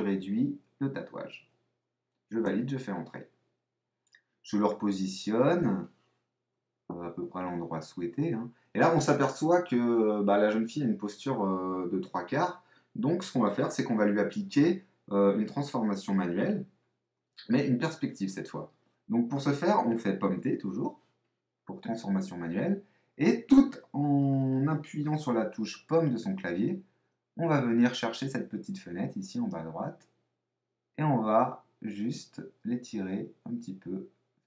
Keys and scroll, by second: 6.5 Up, 6.7 Right, 7.4 Up, 7.7 Left, 8.1 Up, 17.0 super+t.